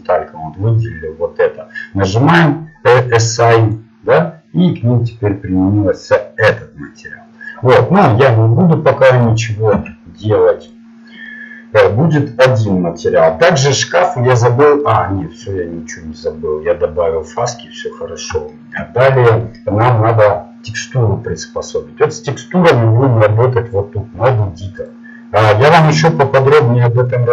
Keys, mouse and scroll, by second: 3.8-6.1 drag, 8.5-9.6 drag, 9.8 Tab, 11.4-14.0 middle drag, 15.0 middle click, 16.6 middle click, 18.0-19.0 middle drag, 19.2 middle click.